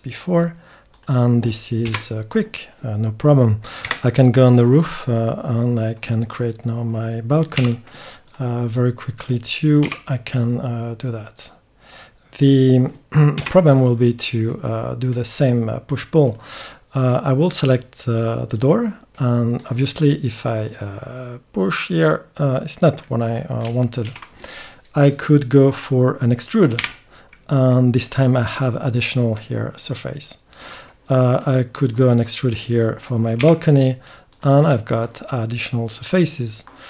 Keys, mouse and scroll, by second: 3.8 KP_7, 7.6 k, 14.5 click, 14.5 middle click, 15.4 click, 15.6-19.2 middle drag, 19.2-22.4 drag, 22.4 middle click, 24.0 ctrl+z, 26.8 e, 27.4 click, 27.6 click, 30.9-32.4 middle drag, 32.4-34.7 drag, 33.4 e, 34.7 middle click.